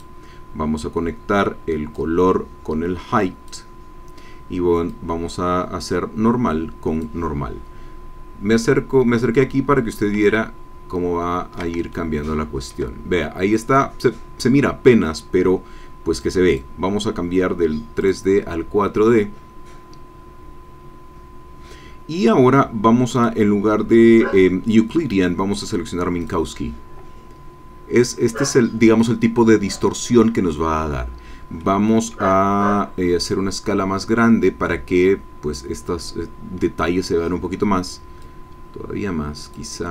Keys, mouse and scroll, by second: 4.9-8.7 drag, 10.2-11.7 ctrl+drag, 11.9-12.9 ctrl+shift+drag, 16.1 click, 16.5 click, 18.0 click, 23.1 click, 26.2 click, 31.6 middle click, 33.3-35.7 drag, 38.2-39.7 drag.